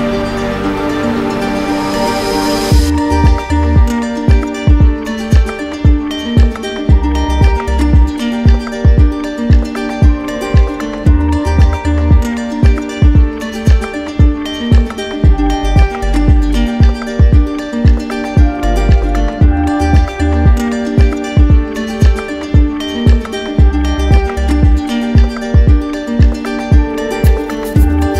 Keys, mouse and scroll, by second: 3.7 click, 7.2 alt+click, 8.4 alt+click, 11.1 click, 12.4 click, 16.5 click, 17.8 alt+click, 19.6 click, 22.0 click, 23.0 click, 23.0 middle click, 23.5 ctrl+z, 26.8 middle click, 27.0 ctrl+z, 27.0 click.